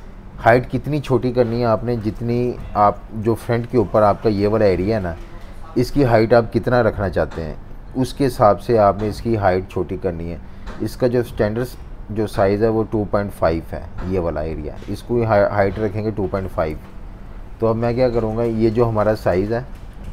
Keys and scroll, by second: 1.2 super+-, 1.4 super+-, 1.7-3.2 typing, 16.7 super+-, 16.9 super+-, 17.1 super+-, 17.9 z, 18.6 v.